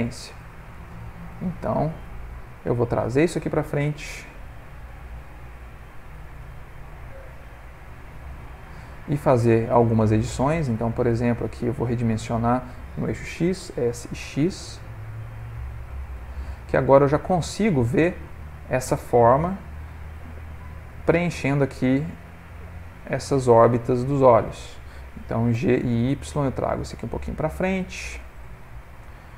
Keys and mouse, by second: 0.7 click, 1.6 ctrl+middle click, 2.3 g, 6.4 middle click, 8.9 middle click, 10.3 click, 10.9 ctrl+middle click, 11.0 ctrl+middle click, 13.7 s, 16.8 middle click, 21.7 middle click, 25.5 g, 28.1 middle click.